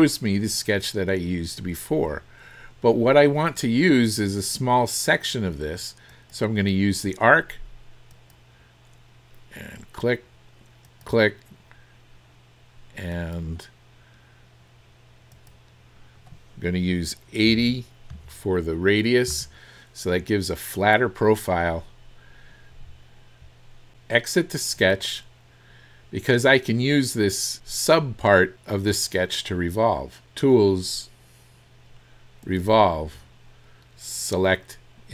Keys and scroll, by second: 17.5 KP_8, 18.1 KP_0, 19.3 Return, 19.3 KP_0.